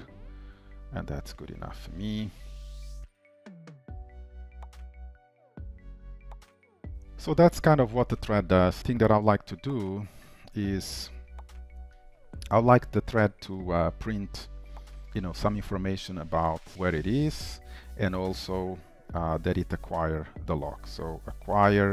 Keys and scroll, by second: 1.5 ctrl+s, 2.6 alt+Up, 4.3 ctrl+v, 6.4 shift+Return, 7.0 ctrl+s, 15.1 Return.